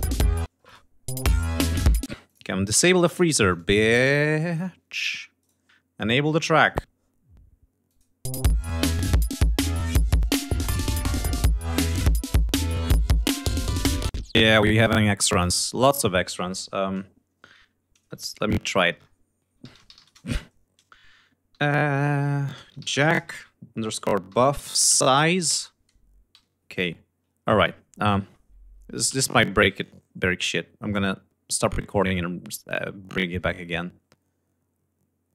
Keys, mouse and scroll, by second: 0.0 space, 0.7 click, 1.1 space, 1.6 ctrl+scroll up 1, 2.1 ctrl+space, 2.3 ctrl+click, 2.9 click, 3.5 click, 3.8 scroll up 1, 4.9 click, 5.4 right click, 6.5 click, 8.0 click, 8.3 space, 13.7 space, 15.3 F1, 18.2 F1, 19.0 F1, 20.0 Return, 22.4-23.4 typing, 24.8 shift+Tab, 25.3 Return, 28.2 F1, 29.1 ctrl+s.